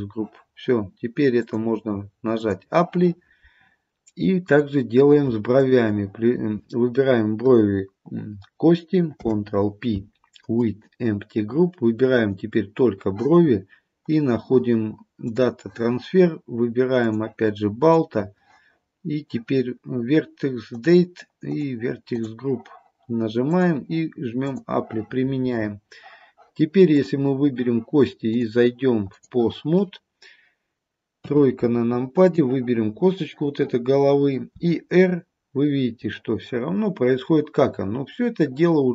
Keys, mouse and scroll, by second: 1.5 click, 5.6 shift+click, 9.2 ctrl+p, 12.2 click, 14.1 click, 17.0 click, 19.6-20.1 scroll down 3, 20.8 click, 21.5 click, 22.2 click, 23.6 click, 27.0 click, 28.4 click, 31.2 KP_3, 32.3 click, 34.6 r.